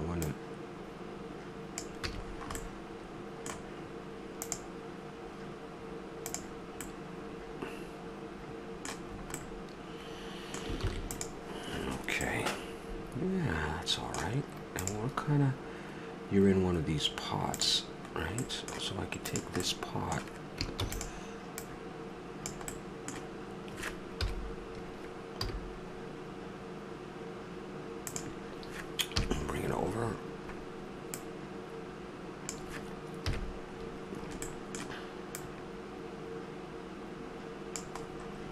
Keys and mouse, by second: 0.2-1.2 middle drag, 1.2 click, 2.1 a, 2.3-3.5 middle drag, 6.8 middle click, 7.5 middle click, 10.8 ctrl+s, 18.4 middle click, 19.3-20.8 drag, 20.8 shift+d, 21.6-22.8 drag, 22.8-24.0 middle drag, 24.2 KP_7, 25.3 g, 29.1 KP_3, 30.0-31.1 middle drag, 31.1-33.0 drag, 33.3 KP_Decimal, 35.3-37.3 drag, 38.0-38.5 middle drag.